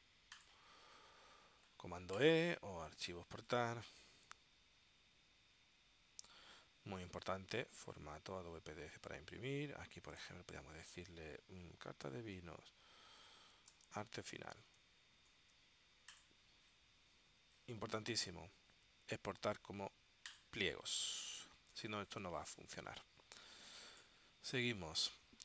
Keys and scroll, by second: 11.9 Left, 13.0 shift+-, 14.2 shift+a, 14.6 shift+f.